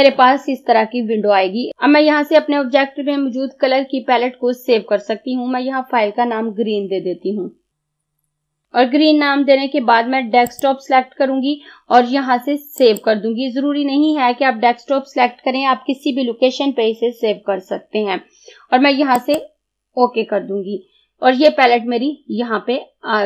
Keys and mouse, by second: 7.7 g, 8.1 r, 10.1 typing, 10.5 click, 19.2 click.